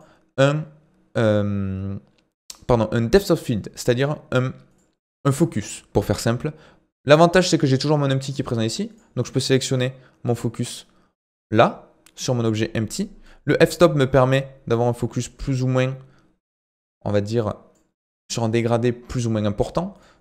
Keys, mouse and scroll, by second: 4.3 click, 4.7-7.7 drag, 8.9 click, 13.3-20.2 drag.